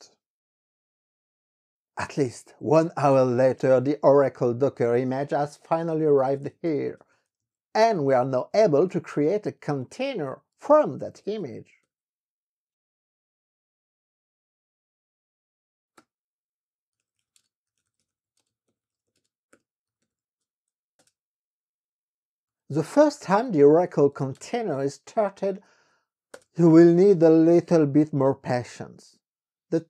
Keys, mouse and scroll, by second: 4.9-12.0 typing, 16.2 KP_Enter, 16.8-20.8 typing, 21.1 Return, 22.4-26.3 typing, 26.5 Return.